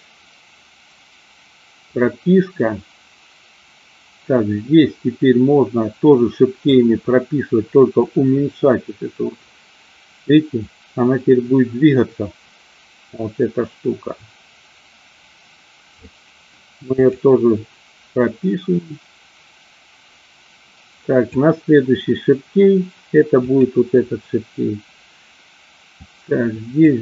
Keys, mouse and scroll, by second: 8.1-16.3 drag, 17.0 click, 18.3-21.6 drag, 23.5 click, 26.1 click.